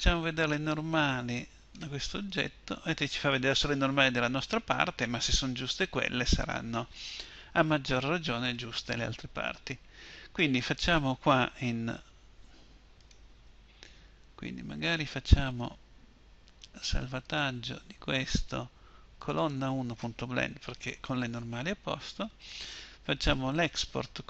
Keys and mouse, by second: 11.8 Tab, 13.3 Tab.